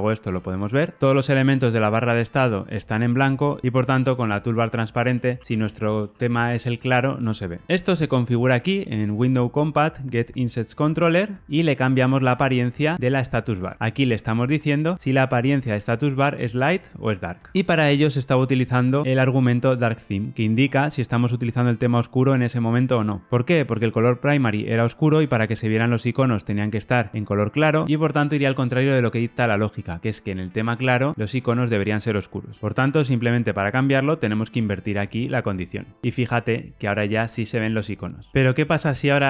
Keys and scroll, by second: 0.2 super+z, 3.6 super+z, 4.6 shift+super+z, 5.1 shift+super+z, 32.6 super+z.